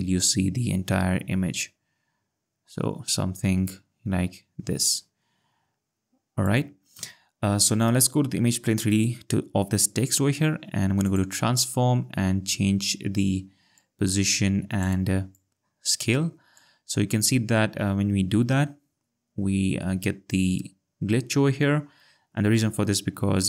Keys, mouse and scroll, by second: 8.8 click, 11.0 click, 13.8 click, 15.4 click, 19.0-19.9 ctrl+scroll, 21.8-22.5 scroll.